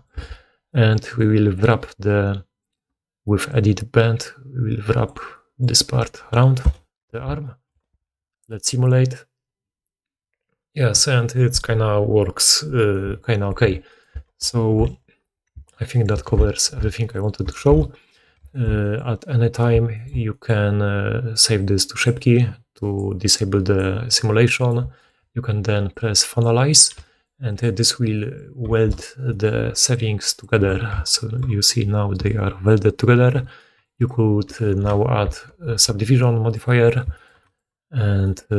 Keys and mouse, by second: 0.1 alt+a, 1.0 middle click, 1.0 right click, 7.1 alt+a, 7.8 shift+space, 14.5 alt+q, 14.8 alt+a, 16.0 middle click, 16.0 right click, 16.3 alt+q, 16.9 alt+a, 17.6 shift+space, 17.9 middle click, 17.9 right click, 24.5 middle click, 24.5 right click, 26.9 g, 27.5-29.8 middle drag, 29.6-30.6 d, 29.8-38.5 drag, 32.1-33.2 typing, 32.8-34.0 middle drag, 32.8-34.0 right drag, 36.5 ctrl+1.